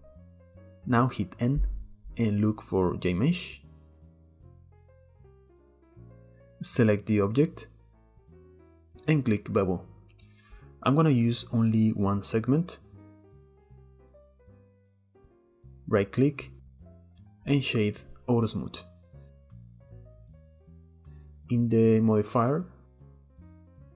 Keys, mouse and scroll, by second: 1.3 n, 3.8 click, 7.2 click, 9.3-12.3 drag, 16.3-18.6 right drag, 19.2 middle click, 19.7 scroll up 1, 20.0-20.4 shift+middle drag, 20.4-21.9 scroll up 1, 21.9 click, 23.8-23.9 scroll down 8.